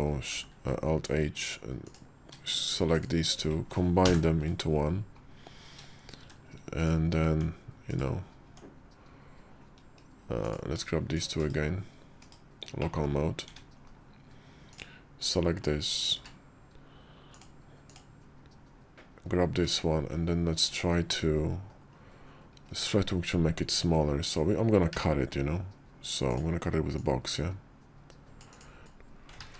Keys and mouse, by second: 0.2 alt+h, 3.9 ctrl+j, 6.1 shift+2, 6.8 right click, 7.1 Tab, 7.7 /, 8.3 Tab, 10.3 click, 11.2 shift+/, 12.0 /, 12.7 middle click, 13.4 `, 13.7 KP_5, 14.6 click, 16.0 q, 19.5-22.5 typing, 24.8 d, 26.8-28.6 drag.